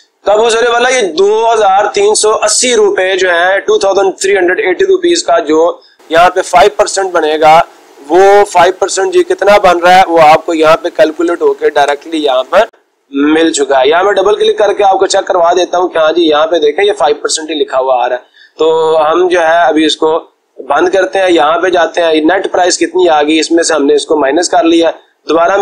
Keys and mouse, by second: 5.1-6.2 drag, 6.8-8.6 drag, 13.7 click, 14.7 click, 21.5-22.5 drag, 24.2 click, 24.4 click.